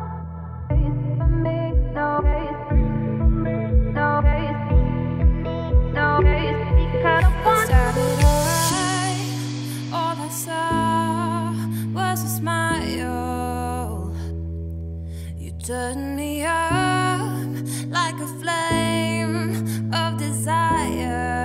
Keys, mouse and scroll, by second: 2.2 scroll down 3, 2.4 middle click, 2.9 `, 3.5-3.9 scroll down 3, 3.9-4.4 scroll up 2, 4.4 e, 6.9-7.3 scroll down 2, 7.3 e, 10.9 e, 13.1-13.9 scroll up 2, 13.9-14.7 scroll up 1, 14.7 click, 15.3 g, 17.3 ctrl+z, 18.2 shift+click, 19.6 ctrl+click, 20.2 z, 20.5 g.